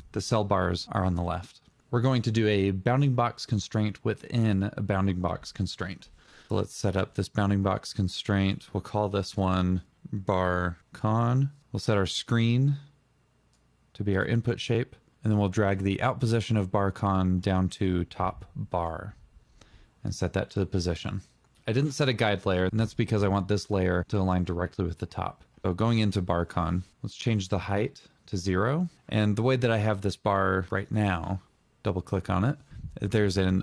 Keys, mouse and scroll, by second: 5.5 Return, 8.4 Return, 8.7-9.8 typing, 24.8 click, 24.9 double click, 29.8 double click.